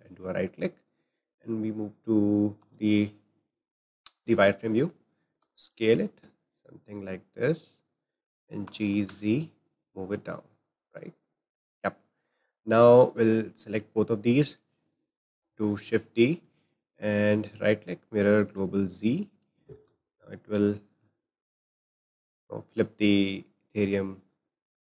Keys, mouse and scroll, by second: 2.6 alt+z, 3.5 scroll up 2, 5.4 s, 8.6 g, 11.8 scroll up 1, 12.2 click, 12.6 scroll down 2, 13.1-15.1 drag, 15.1 shift+d, 16.6-19.7 right drag, 19.9 g.